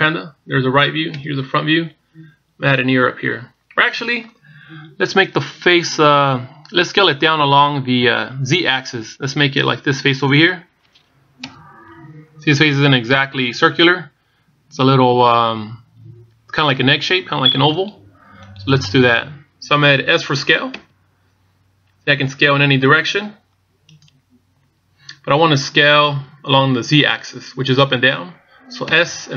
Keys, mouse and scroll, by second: 0.2 KP_1, 0.9 KP_3, 2.0 KP_1, 12.2 KP_1, 13.1-13.4 scroll down 1, 21.6 s.